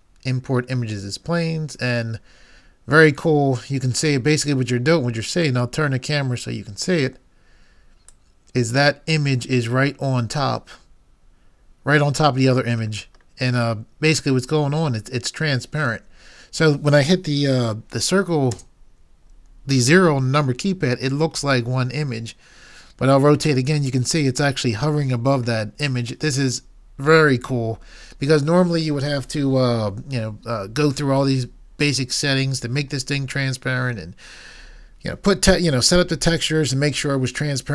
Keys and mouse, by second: 8.3-9.8 drag, 10.6-13.0 middle drag, 14.4 middle click, 18.6 KP_0, 28.4-29.5 middle drag.